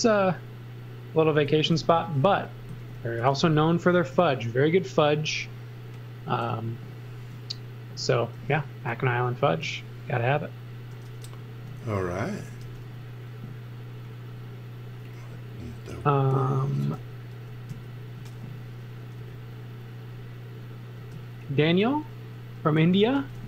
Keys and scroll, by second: 1.5-4.0 typing, 8.4 m, 11.2-13.1 typing, 16.9 super+z, 19.1 b, 20.9 space, 22.8-23.4 typing.